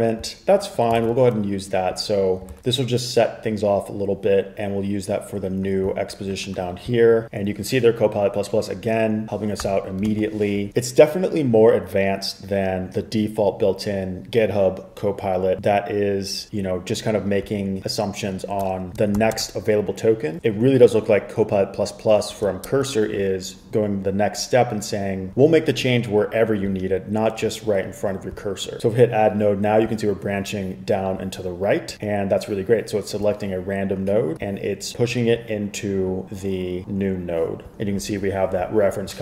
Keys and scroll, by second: 1.1 super+c, 9.7 Tab, 19.3 shift+3, 19.5 space, 22.5 BackSpace, 22.8 BackSpace.